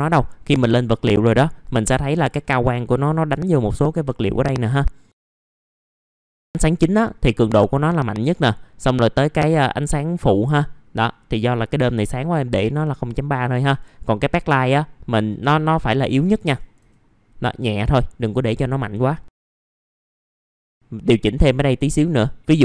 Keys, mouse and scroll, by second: 5.1 scroll up 1, 5.8-6.4 scroll down 1, 6.4-11.4 drag, 18.1 KP_0, 18.4 KP_Decimal, 18.7 KP_5, 20.7 click, 21.2-22.1 scroll up 1, 22.1-22.4 scroll down 1, 22.4 middle click.